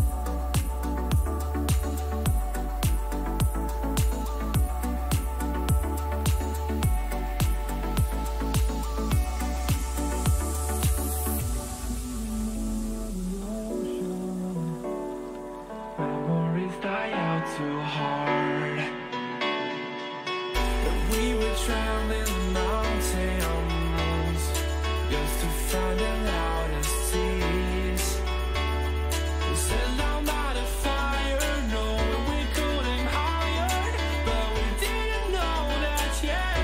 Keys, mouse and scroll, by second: 1.9-4.2 middle drag, 4.2 ctrl+r, 6.5 middle click, 7.2-9.4 middle drag, 11.1-14.7 middle drag, 19.0-24.2 middle drag, 26.7 KP_3, 27.2 KP_1, 28.5 ctrl+KP_1, 30.7-32.6 middle drag, 32.6 ctrl+KP_1, 34.8-36.6 drag, 36.0-36.6 middle drag, 36.0-36.6 right drag.